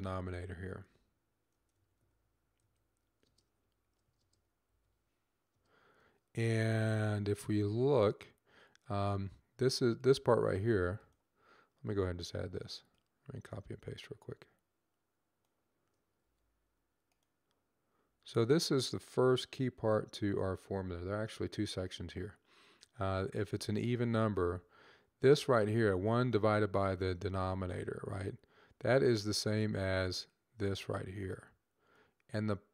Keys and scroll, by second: 0.2-2.3 typing, 3.5-4.5 typing, 5.8 typing, 16.1 ctrl+c, 17.9 ctrl+v, 19.9 ;.